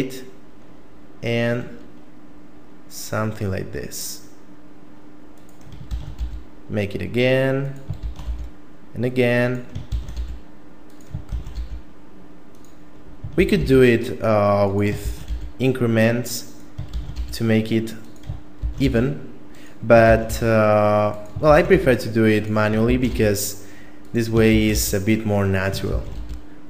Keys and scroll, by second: 5.9 shift+d, 8.0 shift+d, 9.9 shift+d, 11.3 shift+d, 13.4 shift+d, 15.1 shift+d, 16.9 shift+d, 18.6 shift+d, 20.1 shift+d, 21.5 shift+d, 22.9 shift+d, 24.5 shift+d, 26.0 shift+d.